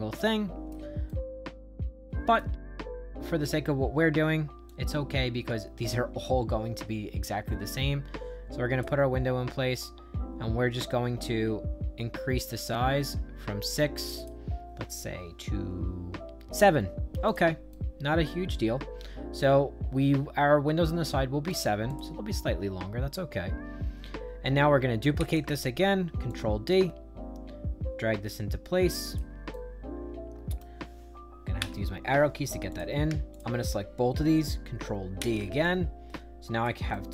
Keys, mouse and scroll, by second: 1.0-2.3 right drag, 2.7 middle click, 3.7 middle click, 4.6-8.7 drag, 12.3 click, 14.1 click, 17.2 click, 17.6-21.4 right drag, 21.8 click, 25.1 ctrl+d, 26.2-29.1 drag, 29.4-30.5 right drag, 31.5 Up, 32.6 click, 33.2 shift+click, 35.1 ctrl+d, 35.5-36.6 drag, 36.8 right click.